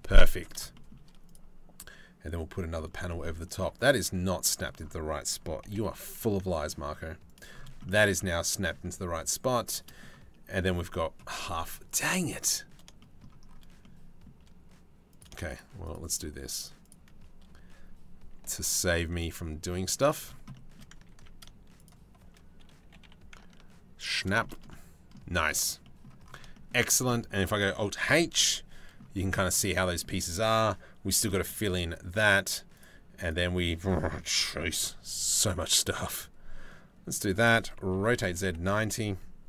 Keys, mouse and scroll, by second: 0.4 shift+middle click, 0.9 click, 2.8 shift+middle click, 5.3 g, 11.5 click, 12.5 shift+middle click, 13.3 shift+middle click, 14.8 click, 18.1 g, 20.4 click, 20.8 ctrl+z, 22.5 g, 24.1 middle click, 25.1 click, 25.5 middle click, 26.8 click, 27.7 alt+h, 28.0-29.1 drag, 29.1 middle click, 29.5 middle click, 34.0 KP_7, 34.9 shift+d, 37.6 r.